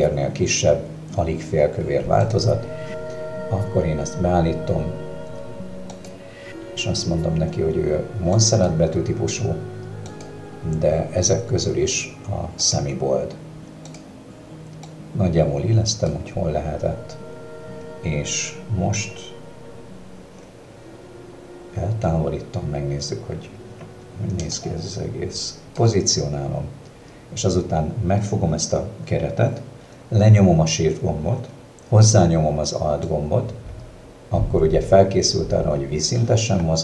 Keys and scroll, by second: 25.9 space.